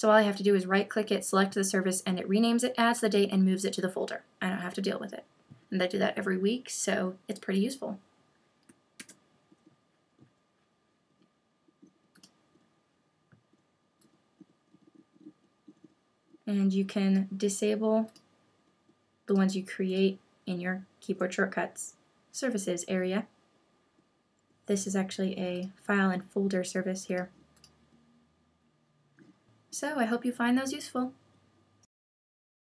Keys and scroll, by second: 9.0 super+q.